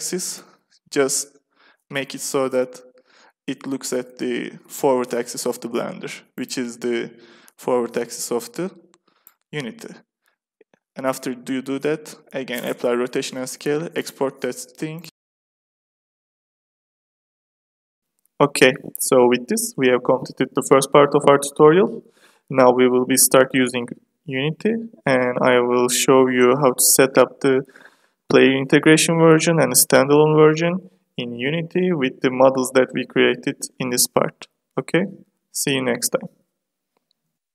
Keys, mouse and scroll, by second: 0.2 KP_5, 1.1 r, 3.5 KP_5, 4.2 r, 8.0-11.4 drag, 11.4 ctrl+a, 13.9 click, 15.6-16.7 drag, 16.7 middle click, 18.5 KP_1, 22.0 middle click.